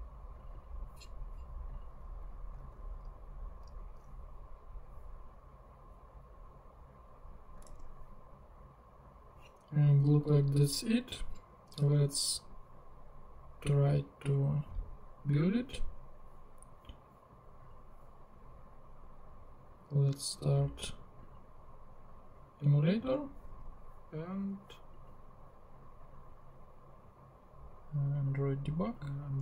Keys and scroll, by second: 2.2 Return, 2.7 super+v, 7.7 super+Tab, 12.1 super+Tab.